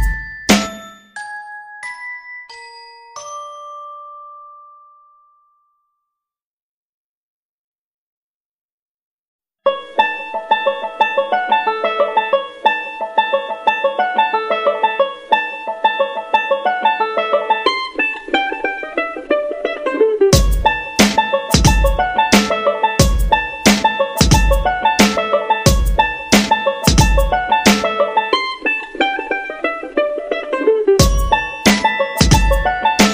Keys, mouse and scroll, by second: 32.1 ctrl+g, 32.9-33.1 drag.